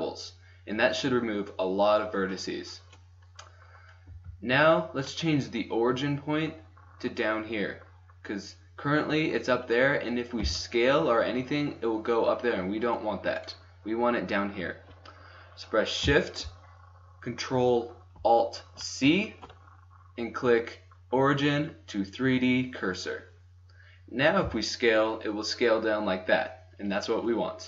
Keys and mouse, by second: 4.2 Tab, 10.4 s, 24.4 s.